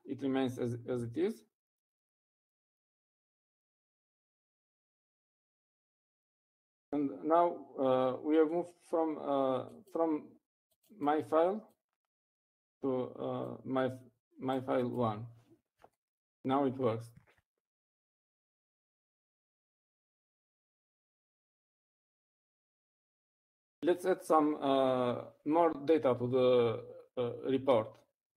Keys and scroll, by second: 6.3-6.7 typing.